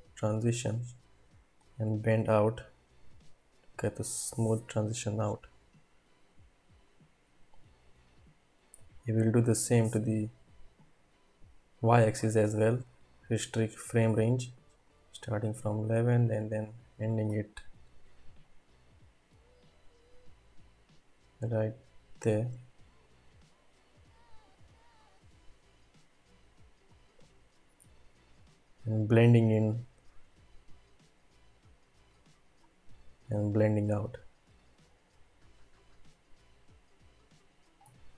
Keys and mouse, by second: 1.6-8.0 drag, 9.8 click, 10.8 click, 13.3 click, 14.8 click, 15.2-17.2 drag, 18.4 click, 23.1-27.1 drag, 29.8-32.7 drag, 33.5-35.7 drag.